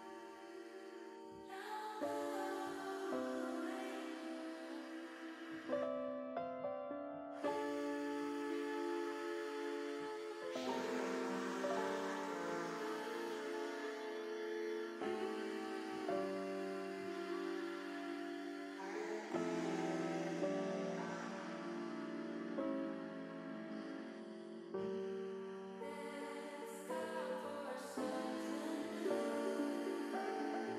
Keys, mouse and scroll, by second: 1.2 shift+middle click, 2.6 click, 3.6 click, 6.0-7.1 drag, 7.4 middle click, 9.4 click, 10.8-12.8 drag, 13.1-15.0 drag, 15.5 middle click, 15.8 ctrl+z, 16.1 ctrl+z, 16.3 ctrl+z, 16.4 ctrl+z, 16.6 ctrl+z, 16.7 ctrl+z, 16.9 ctrl+z, 17.1 ctrl+z, 17.3 ctrl+z, 17.7 ctrl+z, 18.1 ctrl+z, 18.8 ctrl+shift+z, 19.1 ctrl+shift+z, 19.4 ctrl+shift+z, 20.2 ctrl+z, 26.6-28.7 drag.